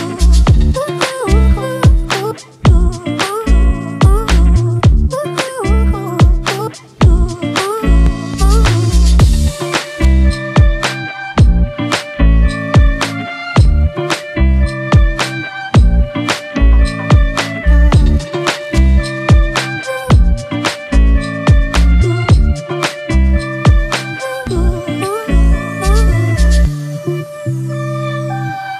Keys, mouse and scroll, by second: 10.4 alt+click, 18.1-18.9 typing, 23.6 right click, 25.0 double click.